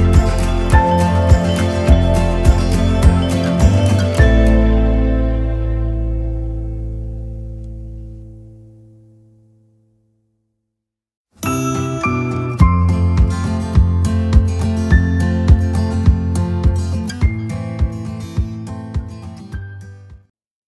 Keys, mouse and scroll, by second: 0.5 click, 11.5 click, 14.1 click, 18.3 click, 20.6 click.